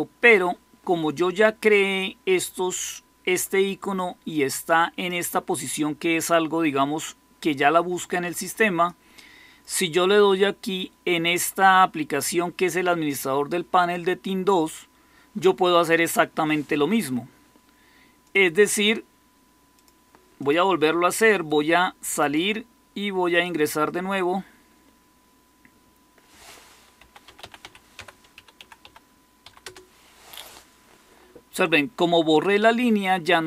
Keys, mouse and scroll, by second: 26.6-29.3 typing, 29.6 Return.